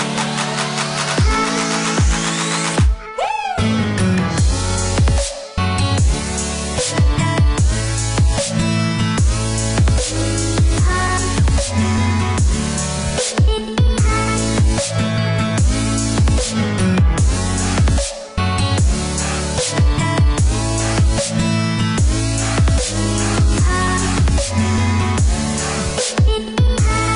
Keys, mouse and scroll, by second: 1.5 click, 2.9 click, 6.7 click, 8.7 Escape, 9.5-10.0 scroll up 1, 10.0 scroll down 1, 11.6 click, 13.0 KP_2, 13.3 KP_0, 14.1 Return, 16.3 click, 18.1 click, 19.9 click, 26.5 click.